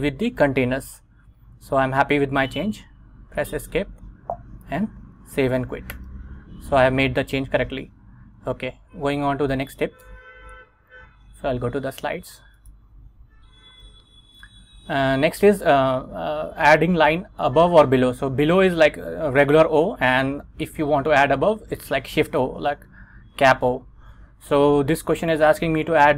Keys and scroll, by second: 3.3 Escape, 4.8 shift+;, 5.3 x, 6.0 Return, 8.8 super+Tab, 10.2 Return, 13.8 Right.